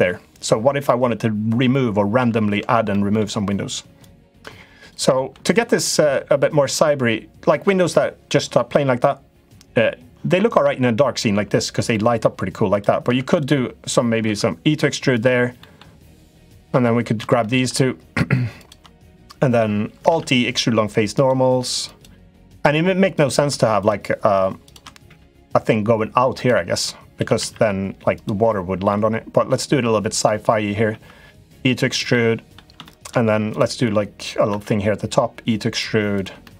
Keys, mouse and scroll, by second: 1.9 ctrl+z, 2.6 middle click, 3.7 click, 5.0 middle click, 5.6 middle click, 6.6 middle click, 7.4 Tab, 11.6 middle click, 12.4 click, 12.8 Tab, 13.0 click, 14.0 e, 15.3 middle click, 16.0 click, 16.3 middle click, 17.1 shift+middle click, 18.4 shift+click, 18.7 middle click, 19.8 alt+e, 22.8 click, 24.8 e, 26.9 s, 28.7 middle click, 29.9 click, 30.6 e, 31.9 middle click, 32.7 middle click, 33.3 click, 34.2 e, 35.9 click, 36.2 middle click.